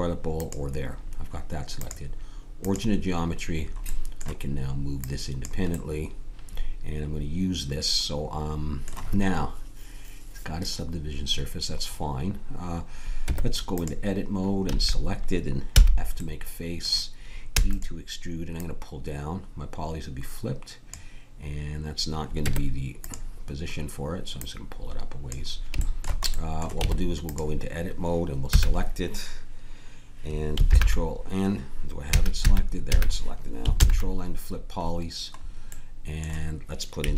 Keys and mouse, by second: 3.5 click, 5.0-7.2 drag, 13.2 Tab, 14.6 a, 15.7 f, 16.2-18.1 drag, 17.5 e, 18.6-20.4 drag, 22.3 Tab, 24.4-25.7 drag, 26.8 Tab, 28.4 a, 30.7 ctrl+n, 32.0 a, 32.4 a, 32.9 a, 33.8 ctrl+n.